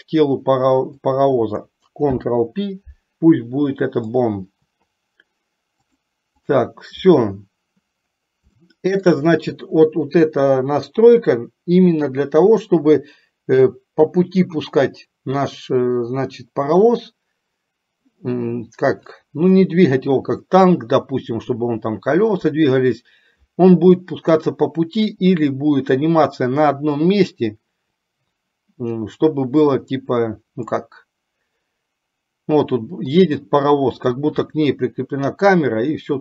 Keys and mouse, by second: 1.2 click, 6.1 click, 8.8-9.5 shift+middle drag, 31.2-33.4 middle drag.